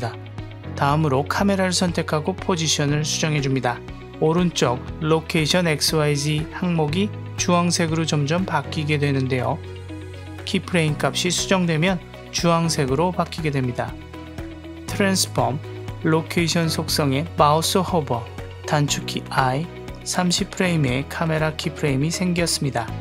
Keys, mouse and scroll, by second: 2.9-4.1 drag, 4.9-6.8 drag, 8.3 click, 8.4 g, 10.2 shift+middle click, 12.1 click, 12.7-13.1 drag, 13.4 click, 19.6 i.